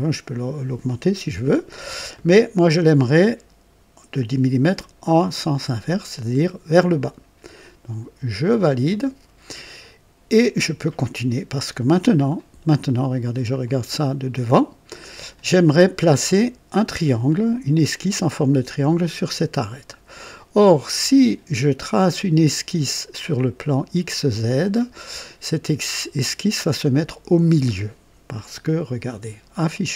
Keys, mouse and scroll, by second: 6.3 click, 8.5 click, 9.8-11.0 drag, 11.2 right click, 12.3 click, 13.6 click, 15.3 click, 17.2 click, 20.5-21.6 drag, 24.6-25.4 drag, 29.7 click.